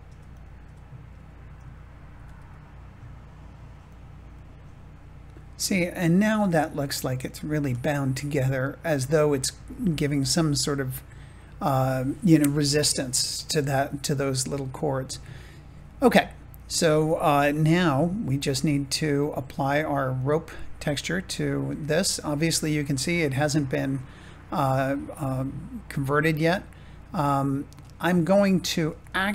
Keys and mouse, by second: 0.0 Tab, 2.1 g, 2.3 z, 3.8 click, 4.2-6.9 middle drag, 7.8 shift+middle click, 8.5 middle click, 15.2 shift+middle click, 16.8 Tab, 20.1-21.4 drag, 28.2 shift+middle click.